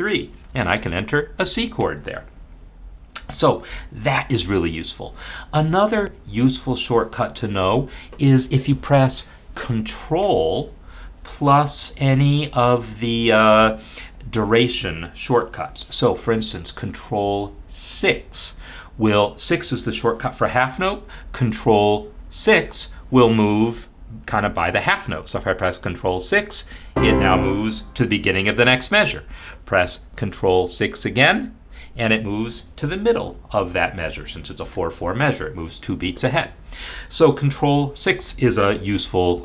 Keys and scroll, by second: 1.3 shift+c, 26.7 ctrl+6, 31.7 ctrl+6.